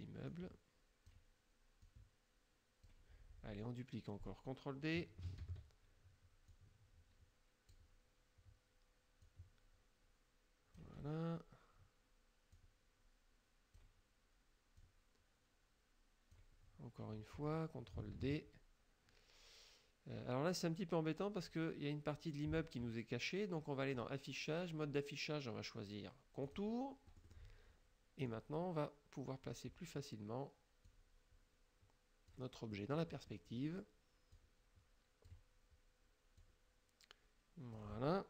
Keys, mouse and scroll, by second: 0.3 click, 1.9 click, 5.5 ctrl+d, 6.6-8.0 drag, 9.3-11.1 drag, 12.6-14.1 drag, 14.8-16.6 drag, 17.5 middle click, 18.2 ctrl+d, 24.0 click, 26.5 click, 27.2 click, 28.3-29.7 drag, 30.9-32.6 drag, 32.8 middle click, 34.4 click, 36.4-38.0 drag.